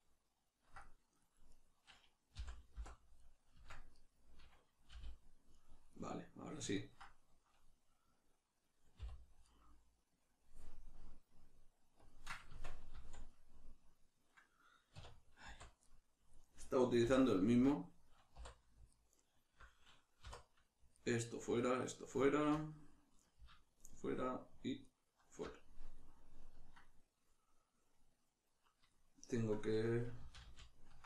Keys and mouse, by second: 1.5 right click, 2.4 l, 4.0 right click, 4.9 g, 5.6 right click, 6.8-9.4 ctrl+middle drag, 9.0 h, 9.4 right click, 12.0-13.3 drag, 12.5 Tab, 13.3-19.0 middle drag, 14.9 \, 15.5 z, 17.0 2, 19.0 alt+right click, 20.2 3, 21.0 alt+right click, 21.6 alt+shift+right click, 22.6-23.8 middle drag, 23.8 alt+shift+right click, 24.8 alt+shift+right click, 26.0-31.0 middle drag, 30.2 ctrl+z.